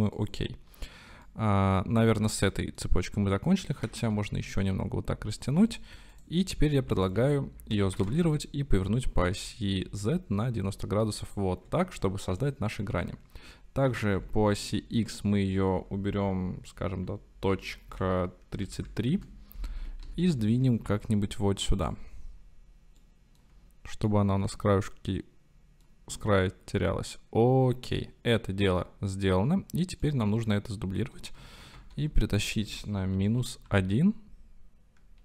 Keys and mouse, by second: 0.2 drag, 1.3-2.1 drag, 2.1-2.8 middle drag, 3.9 s, 4.1 y, 5.7 click, 6.2-6.9 drag, 7.0 drag, 8.0 shift+d, 8.3 r, 8.9 x, 9.4 z, 12.5-12.9 drag, 13.9 s, 14.2 x, 17.9 KP_Decimal, 18.6 KP_3, 18.8 KP_3, 19.2 KP_Enter, 20.1 g, 20.3 y, 21.8 x, 21.9 click, 23.0-23.5 drag, 24.1-25.9 middle drag, 28.0-28.9 middle drag, 30.1-31.0 middle drag, 31.7 shift+d, 31.9 y, 33.1 KP_Subtract, 33.7 KP_1.